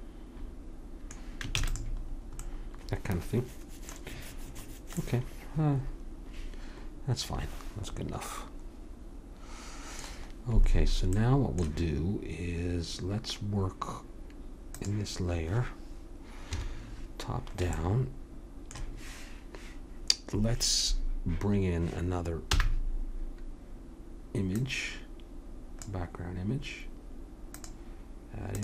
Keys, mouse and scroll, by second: 1.5 ctrl+s, 14.7-16.5 drag, 16.5 KP_7, 22.5 n, 24.6-28.6 drag.